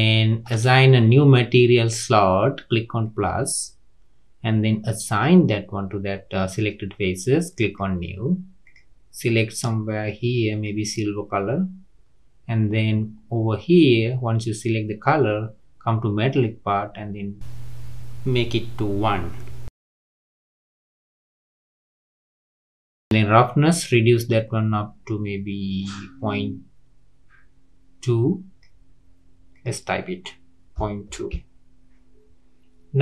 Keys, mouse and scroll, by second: 3.0-8.7 drag, 13.0-13.8 scroll down 3, 13.8-14.4 scroll down 1, 16.4-19.5 drag, 22.2-24.1 scroll down 2, 24.1-27.2 drag, 29.5-32.6 drag.